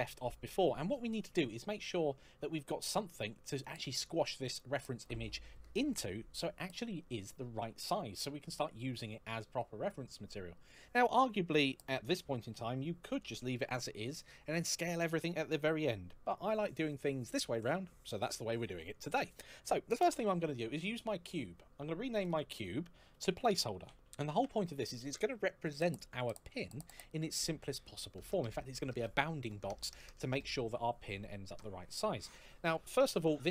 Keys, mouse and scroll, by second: 3.3 click, 21.0 click, 23.0-24.0 typing, 24.2 Return.